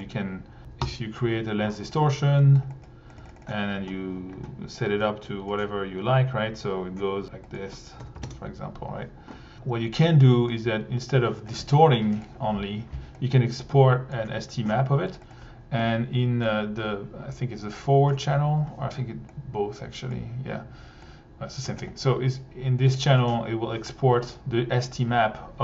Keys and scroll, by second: 0.6 c, 0.7 Down, 0.8 Return, 3.2 1, 8.2 1, 8.3 Page_Up, 12.2 1, 15.1 1, 22.9 1.